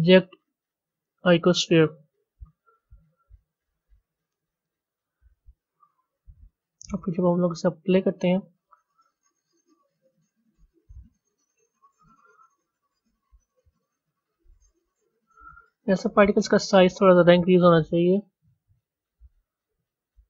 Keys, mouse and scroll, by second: 6.1 a, 6.8 z, 7.1 click, 8.8-10.6 drag, 13.1 scroll up 1, 13.9 scroll up 1, 16.1 click.